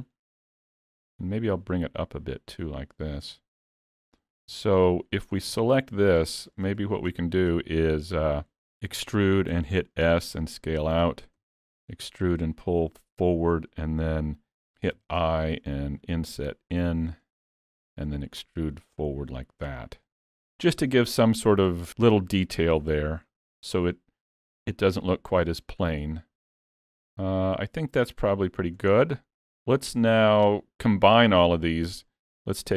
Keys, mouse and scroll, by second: 1.1 click, 3.4 middle click, 3.8-4.5 scroll up 3, 4.5 Tab, 5.5 3, 5.6 click, 6.3 shift+middle click, 6.7 middle click, 7.2 shift+middle click, 8.9 e, 11.4 e, 20.1 alt+a, 20.1 Tab, 22.0-22.8 scroll down 3, 22.8 alt+a, 22.8-23.3 scroll down 5, 23.3 middle click, 26.1-27.0 scroll up 4, 27.1 click, 28.2 click, 28.9-29.4 scroll down 4, 29.4 middle click.